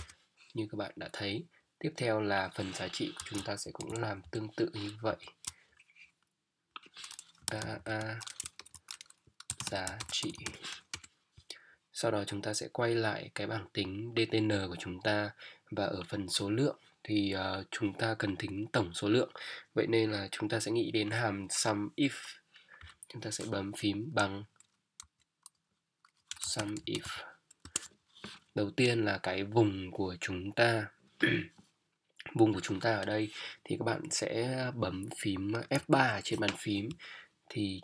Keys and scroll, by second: 3.6 ctrl+shift+Down, 4.2 ctrl+shift+Up, 5.2 shift+Up, 7.4 shift+a, 8.6-10.2 typing, 10.9 Return, 22.8 =, 25.0 i, 26.3 BackSpace, 26.4 s, 26.7 m, 35.9 F3.